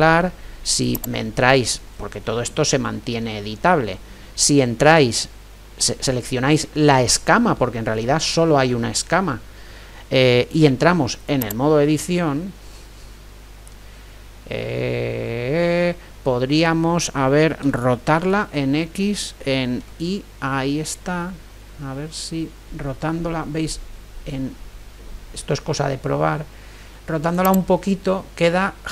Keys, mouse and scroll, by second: 0.9-2.8 right drag, 2.0 click, 2.0-6.9 middle drag, 10.8 Tab, 12.2-14.4 middle drag, 17.8 r, 28.0-28.9 middle drag.